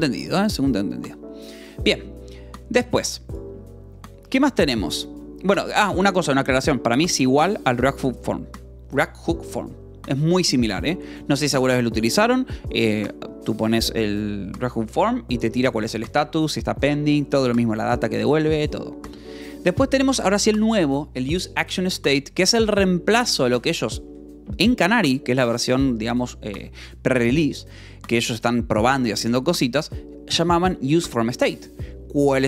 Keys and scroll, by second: 1.3 space, 3.9 j, 6.1 shift+v, 7.0 Escape, 7.7 k, 8.5 j, 10.0 shift+v, 10.8 Escape, 12.5 ctrl+s, 19.1-20.4 typing, 21.8 Escape, 22.3-24.6 typing.